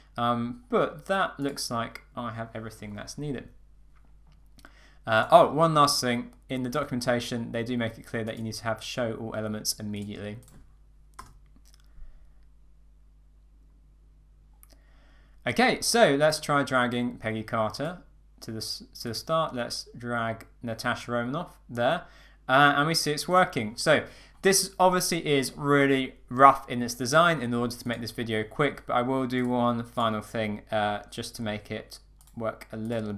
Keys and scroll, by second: 11.2 Return.